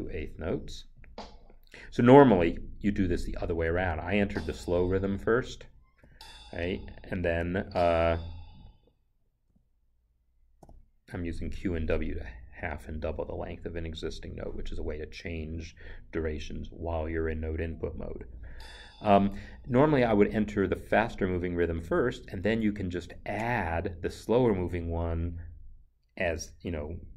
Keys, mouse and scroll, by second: 3.1 click, 3.6 Right, 6.0 d, 9.5 q, 10.6 w, 19.0 Escape.